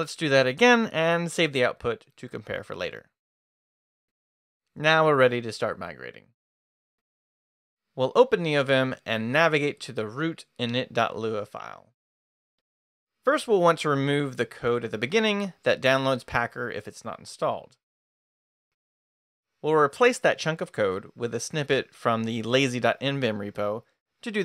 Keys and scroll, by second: 8.8 Return, 9.5-10.4 typing, 11.6 Return, 14.3-15.2 typing, 18.0 d, 19.5 shift+o.